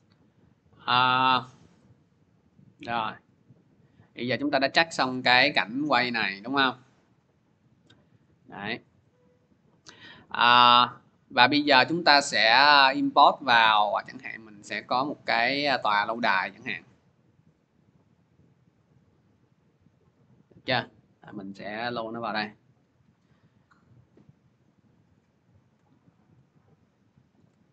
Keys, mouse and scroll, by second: 3.5-4.9 drag, 7.4 click, 8.2 click, 8.9 click, 10.0 click, 12.5 click, 13.0 click, 13.1 click, 14.7 click, 14.9 click, 16.2 click, 16.4 click, 17.4 middle click, 17.7 middle click, 18.6 click, 18.8 click, 22.1 click, 23.1 middle click, 23.3 middle click, 23.9 scroll down 2, 24.0 scroll up 2, 24.1-25.5 scroll, 27.1 shift+click, 27.4 scroll.